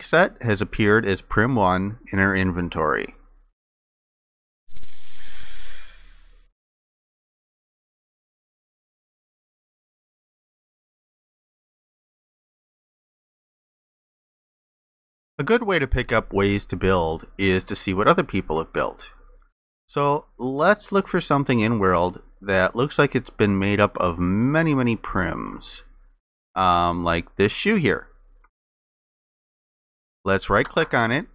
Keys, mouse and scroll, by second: 20.9 alt+click, 22.5 alt+click, 25.1 alt+click, 27.0 alt+click.